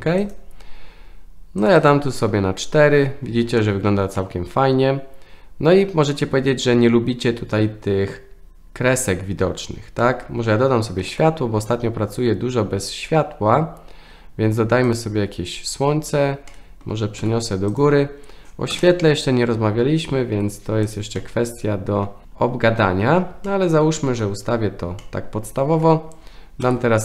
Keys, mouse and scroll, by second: 0.2 click, 1.7 click, 1.8 click, 3.6-3.9 shift+middle drag, 4.2-5.8 middle drag, 10.0 middle click, 11.1 shift+a, 16.5-16.8 middle drag, 17.2 g, 18.7 KP_0, 20.3 r, 21.2-22.1 middle drag, 22.2-23.2 middle drag, 22.2 r, 23.5-24.2 shift+middle drag, 25.0-25.8 shift+middle drag, 26.7 F12.